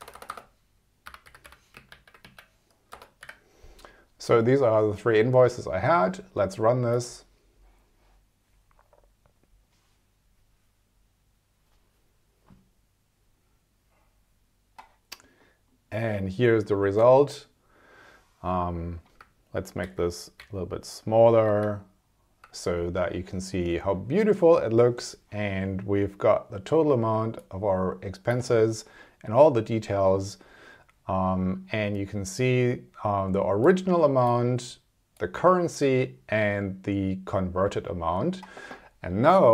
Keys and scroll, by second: 0.0 BackSpace, 1.6 g, 1.9 alt+Left, 3.0 BackSpace, 3.2 3, 19.8 super+-.